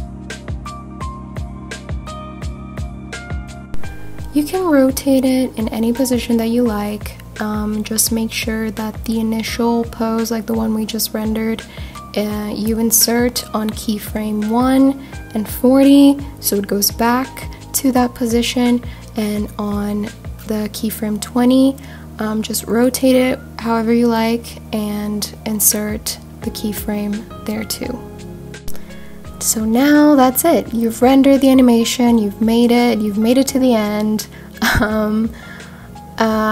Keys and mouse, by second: 0.1 click, 0.6 click, 2.1 shift+click, 2.5 shift+click, 4.3-8.0 right drag, 9.5-11.4 drag, 12.1-13.6 right drag, 14.8-15.8 drag, 17.1 r, 17.3 z, 20.6 click, 21.3 right click, 24.4-25.2 drag, 26.4 click, 31.2 click, 32.6-33.9 drag, 35.5-36.5 drag.